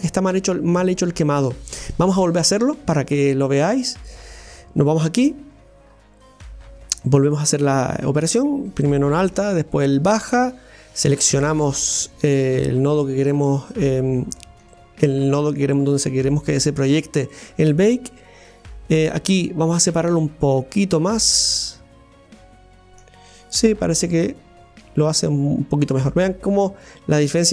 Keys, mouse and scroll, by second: 3.9 click, 7.3 drag, 8.1 click, 10.0 ctrl+click, 11.5 shift+click, 20.2-22.7 drag, 22.9-24.3 middle drag, 24.3-27.2 drag.